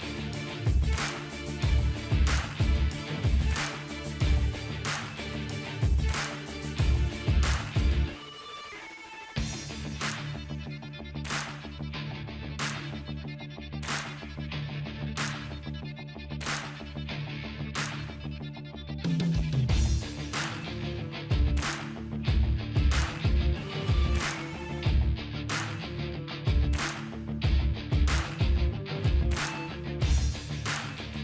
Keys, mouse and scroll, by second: 1.4-3.4 drag, 7.1-7.5 ctrl+scroll up 1, 9.3-11.0 drag, 11.7-12.7 scroll down 1, 13.5-17.5 alt+drag, 20.4-23.3 typing, 29.6 space, 30.0 click, 30.2-30.8 space.